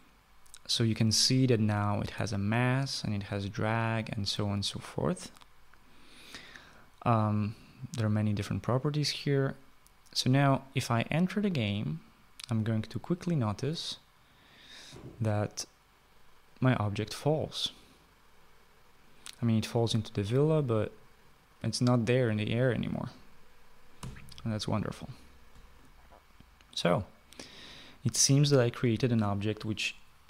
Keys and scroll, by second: 24.3 Escape.